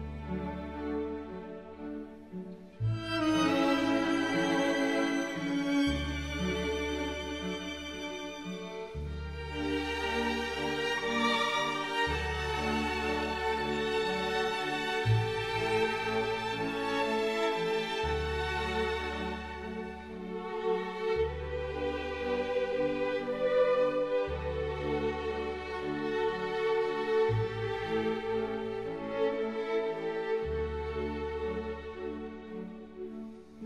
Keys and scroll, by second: 3.6 ctrl+z, 4.6 ctrl+z, 5.9 ctrl+z, 6.7 ctrl+z, 8.7 ctrl+z, 12.7 ctrl+z, 13.7 ctrl+z, 27.9 ctrl+z, 33.5 ctrl+z.